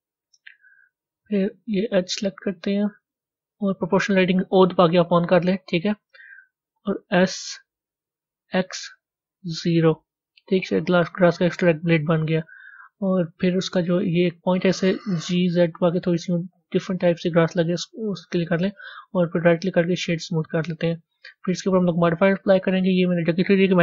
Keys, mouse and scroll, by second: 19.3 right click, 20.1-22.5 middle drag, 22.5-23.8 drag.